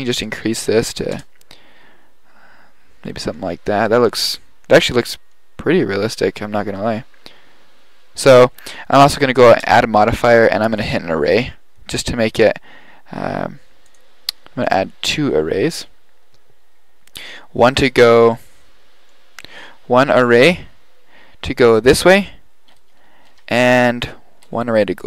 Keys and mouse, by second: 4.7 middle click, 9.7-11.9 drag, 14.0-16.4 drag, 18.7 middle click, 20.1 KP_7, 23.5 KP_7.